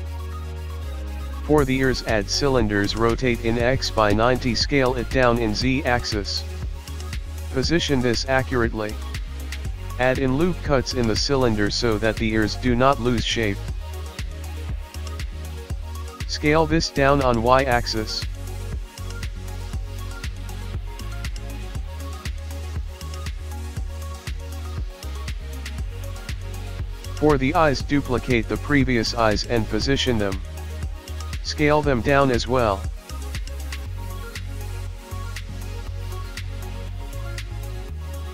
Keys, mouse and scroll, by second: 0.2-0.9 scroll down 11, 0.9 r, 1.8 s, 2.4 g, 2.9 scroll up 10, 3.1 shift+middle click, 3.4 s, 4.3 s, 4.8 g, 6.2 s, 7.3 g, 8.4-9.1 scroll up 6, 8.6 shift+middle click, 9.1 shift+middle click, 9.3 click, 9.6 click, 10.3 click, 10.9 alt+click, 11.1 alt+click, 11.4 alt+click, 11.9 e, 13.7 click, 14.0 click, 14.3 Tab, 14.4 click, 14.6 scroll down 10, 14.8 scroll up 6, 15.1 middle click, 15.7 click, 15.8 Tab, 18.1 click, 18.5 KP_1, 18.7 click, 19.1 click, 20.3 Tab, 20.5 click, 20.7 scroll down 6, 20.9 click, 21.3 middle click, 22.1-22.8 scroll up 17, 23.0-23.8 scroll down 12, 23.7 middle click, 24.4-24.7 scroll down 2, 24.7 KP_1, 25.1 click, 25.9 Tab, 26.4 Tab, 26.7 scroll up 3, 27.0 scroll down 1, 27.2 shift+middle click, 27.7 scroll up 3, 28.2 click, 28.4-28.8 scroll down 4, 28.9 shift+d, 30.6 KP_1, 30.7 middle click, 30.7-31.1 scroll up 5, 31.5 KP_7, 32.7 g, 34.0 KP_1, 34.5 shift+middle click, 34.9 scroll up 6, 35.0 shift+middle click, 35.4 s, 36.8 middle click, 37.3 KP_3, 37.7 g.